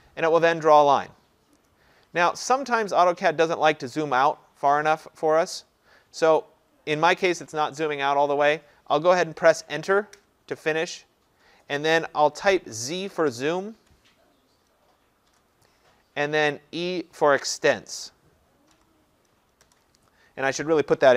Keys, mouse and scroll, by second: 0.9-3.2 scroll, 3.2-4.8 scroll, 4.8-5.2 scroll down 10, 5.2-5.8 scroll, 5.9-7.4 scroll, 10.2 Return, 13.8 z, 15.3 Return, 18.8 e, 19.7 Return.